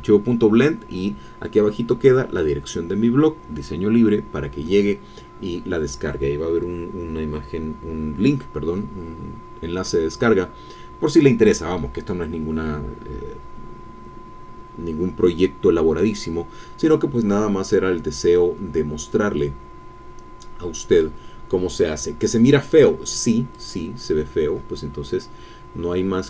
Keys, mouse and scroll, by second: 18.3-21.2 drag, 23.5 click.